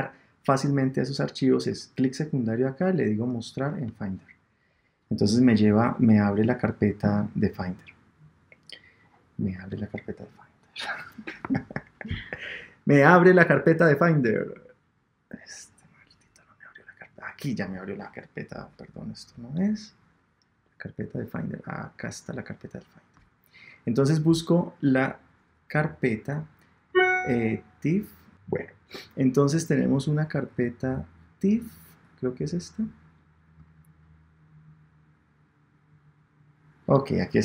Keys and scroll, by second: 28.3 super+Tab.